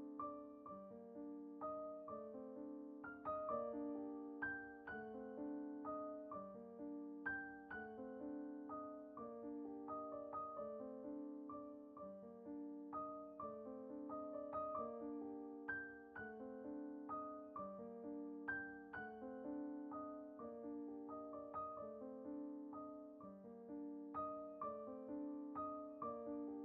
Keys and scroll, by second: 0.1 Left, 0.4 Return, 1.7 Caps_Lock, 1.8 Down, 1.9 Down, 2.0 Down, 2.5 t, 3.4 shift+Down, 3.7 Return, 5.7 Down, 9.9 Return, 10.3 Down, 10.4 Down, 10.5 Left, 10.6 Left, 10.7 Left, 10.8 Left, 13.3 Return, 14.6 ctrl+=, 18.4-20.0 typing, 19.7 Caps_Lock, 21.0 ctrl+t, 21.8 Return, 24.5 v, 26.1 b.